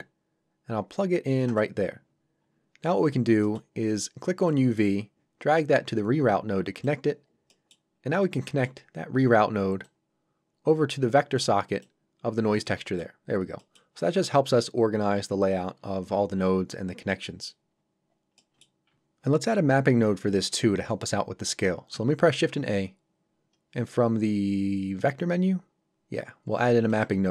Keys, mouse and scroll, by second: 2.4 scroll up 1, 3.4 middle click, 4.5 click, 7.2 scroll down 1, 7.5 middle click, 8.2 scroll down 1, 8.5 middle click, 9.0-9.8 scroll down 1, 9.8 click, 12.6 middle click, 13.3 scroll down 1, 13.6 middle click, 17.7 scroll up 1, 18.4 middle click, 22.5 shift+a, 26.9 click.